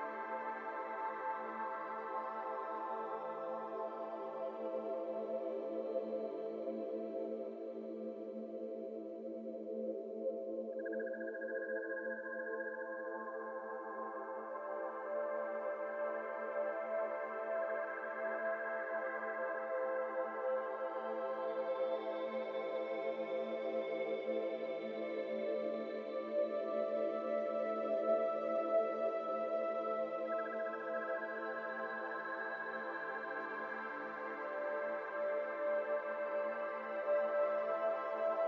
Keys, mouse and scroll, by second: 0.1 Tab, 0.2 scroll down 2, 0.7 ctrl+1, 1.1-1.5 middle drag, 1.5 ctrl+z, 1.8 Tab, 2.0 middle click, 2.3 alt+z, 2.5 alt+click, 2.9 x, 3.6 Tab, 3.8 middle drag, 4.0 alt+z, 4.4 ctrl+1, 4.7-5.2 middle drag, 5.2 ctrl+2, 5.5-6.0 middle drag, 6.0 scroll up 3, 6.4 Tab, 6.6 shift+middle click, 6.9 scroll up 1, 6.9 alt+z, 7.2 alt+click, 7.7 alt+click, 7.9 alt+z, 8.3 ctrl+b, 9.2 Tab, 9.3-9.9 scroll down 4, 9.4-9.8 middle drag, 9.9-11.2 middle drag, 11.2 click, 12.2-12.6 drag, 12.6 middle drag, 12.8 click, 12.9 1, 13.6 middle drag, 13.8-14.1 scroll up 4, 14.1 click, 14.4 middle click, 14.5-15.3 scroll up 4, 14.6 Tab, 14.8 shift+middle click, 15.3 2, 15.7 alt+click, 16.3 shift+middle click, 16.7 shift+d, 17.2 s, 18.3 alt+z, 18.8 g, 20.2 f, 20.6 alt+z, 21.0 shift+middle click, 21.7 i, 23.2-25.7 typing, 24.6 alt+z, 26.5 ctrl+z, 27.6 ctrl+l, 28.4 g, 31.7 KP_1, 32.1 alt+z, 32.6 shift+middle click, 33.3 alt+z, 33.8 p, 34.4 Tab, 34.7 click, 35.1 1, 36.0 Tab, 36.4 shift+middle click, 36.6 z, 37.4 2, 37.6 z, 38.4 1.